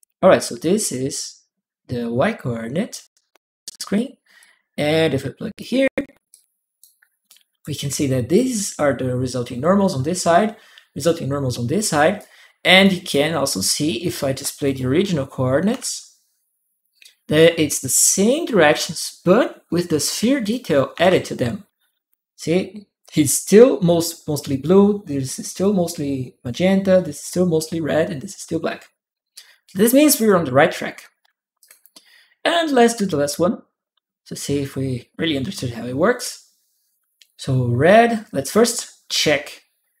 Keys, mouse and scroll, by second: 0.4-2.7 drag, 4.2-5.3 drag, 6.1 click, 7.0 click, 7.0 right click, 7.7 click, 7.7 right click, 8.2-10.8 drag, 11.9 click, 12.0 right click, 14.4 click, 15.5 shift+p, 20.2 shift+click, 20.8 shift+p, 29.7 shift+click, 29.7 p, 31.4 click, 39.0-40.0 drag.